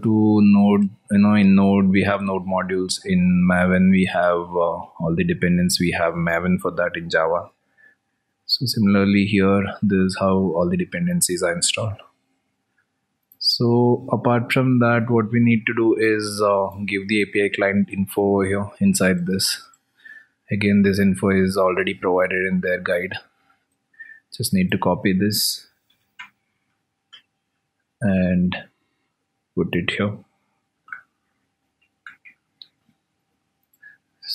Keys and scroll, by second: 3.5 alt+Tab, 7.6 ctrl+v, 8.5 ctrl+s, 12.6 ctrl+z, 13.0 alt+Tab, 19.0 alt+Tab, 22.1 ctrl+v, 23.5 ctrl+s.